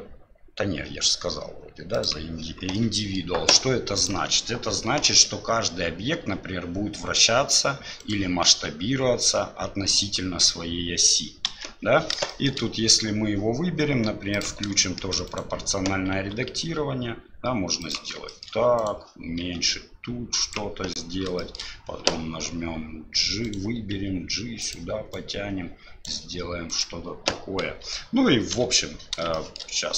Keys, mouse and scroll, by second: 2.7 middle click, 4.0 click, 5.0 r, 8.5 s, 11.5 KP_1, 12.3 middle click, 14.3 click, 14.8 shift+middle click, 15.3 right click, 16.1 s, 18.3 shift+middle click, 18.8 right click, 19.4 s, 21.4 shift+middle click, 23.4 right click, 23.7 g, 25.1 right click, 26.7 right click, 27.6 KP_7, 28.5 KP_Divide, 29.3 shift+middle click.